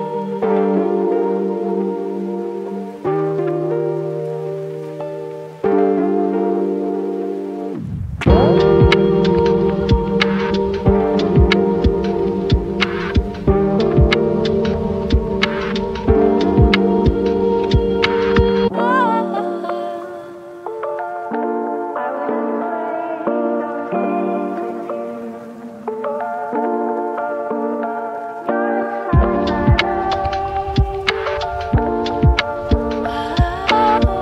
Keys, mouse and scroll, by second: 1.0-2.9 scroll down 1, 2.7-3.8 typing, 5.2 shift+click, 6.0 right click, 16.3 click, 18.0 right click, 19.6 click, 25.5-27.3 typing, 29.2-30.5 typing, 32.1-34.2 typing.